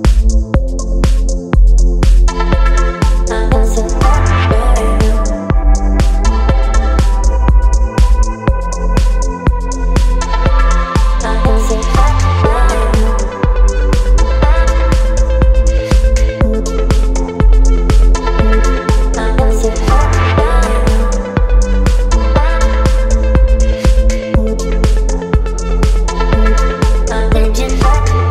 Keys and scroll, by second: 7.6 KP_8, 13.9-16.8 typing, 24.1 space.